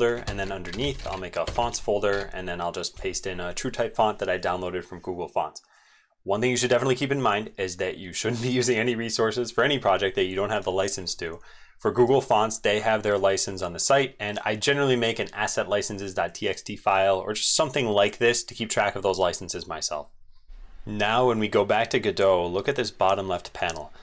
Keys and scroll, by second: 0.3 ctrl+shift+n, 2.1 ctrl+v, 12.1 alt+Up, 12.5 alt+Up, 20.6 ctrl+x, 20.6 super+2.